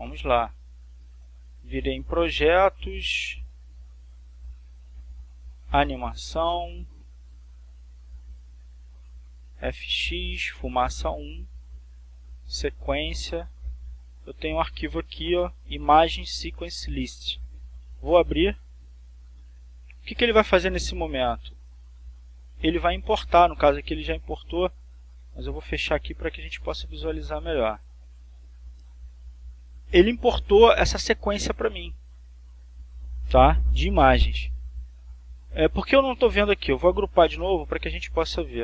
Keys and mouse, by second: 2.1 click, 6.1 click, 7.6-9.0 drag, 9.6-10.8 drag, 11.1 click, 12.6 click, 14.2-15.7 drag, 18.4 click, 22.5 click, 23.4 click, 24.9 click, 26.0 click, 27.3 click, 37.8 click.